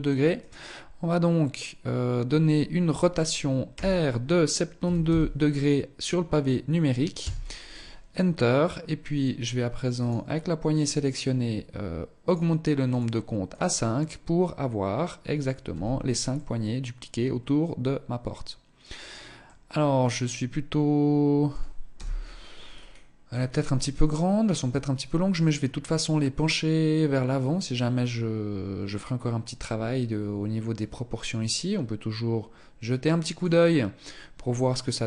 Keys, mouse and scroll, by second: 3.0 r, 7.5 scroll up 1, 9.4 right click, 11.5 click, 11.8 click, 12.9 click, 15.0 z, 15.7 middle click, 18.8 middle click, 20.9 scroll up 1, 21.3 KP_0, 22.0-23.5 scroll down 5, 22.9-23.5 scroll up 1, 25.1-25.4 scroll up 1.